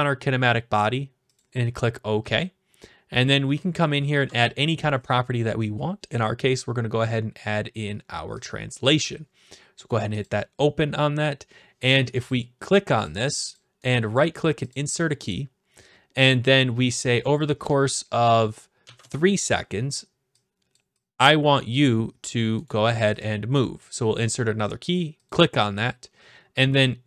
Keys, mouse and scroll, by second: 1.4-2.4 drag, 2.6-3.0 scroll down 4, 3.0-4.2 scroll, 4.2-4.7 scroll, 4.7-5.3 scroll, 5.3-6.7 scroll, 8.5 click, 10.3 click, 12.3 click, 13.0 click, 13.5 click, 13.9 right click, 14.7-15.8 drag, 17.1-18.2 drag, 19.0 Return, 20.7 click, 21.7 click, 22.7 right click, 23.2 click, 25.3-26.4 drag.